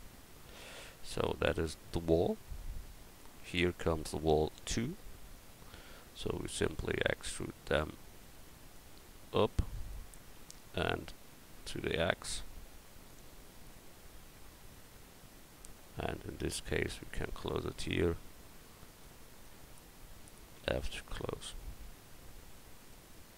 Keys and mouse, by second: 4.3-6.5 drag, 6.5 e, 10.4 e, 11.3-13.1 drag, 20.6 f, 22.5 Tab.